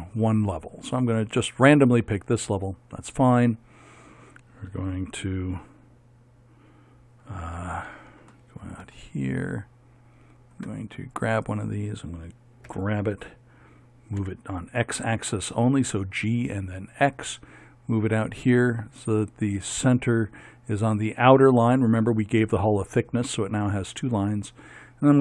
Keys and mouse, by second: 8.4 middle click, 11.1-12.7 right drag, 12.7 g, 24.7-25.2 right drag.